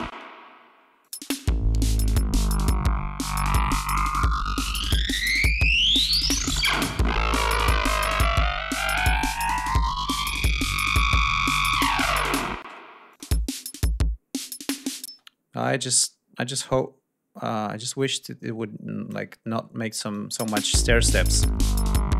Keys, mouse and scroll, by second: 0.7 click, 0.9 space, 3.5-5.8 drag, 7.0 click, 7.8 ctrl+scroll up 2, 10.1-12.1 drag, 12.3 space, 12.8 click, 14.2 click, 14.8 space, 15.4 click, 16.5-19.0 drag, 19.0 ctrl+scroll down 2, 19.7 click, 20.1 space.